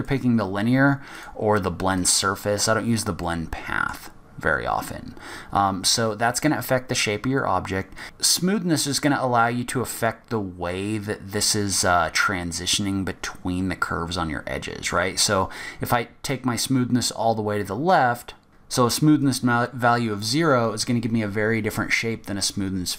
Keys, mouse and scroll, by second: 1.3 click, 3.4 middle click, 4.3-4.6 scroll down 2, 4.6-5.3 scroll up 1, 5.3-5.7 scroll up 3, 5.7-6.4 scroll down 3, 18.5 middle click, 18.5 scroll down 2, 19.4 click.